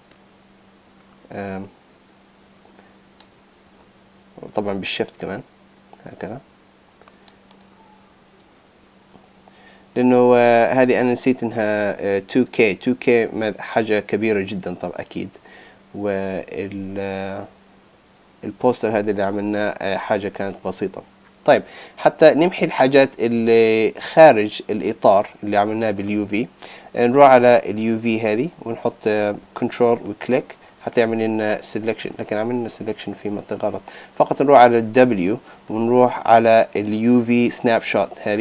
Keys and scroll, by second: 3.8 super+z.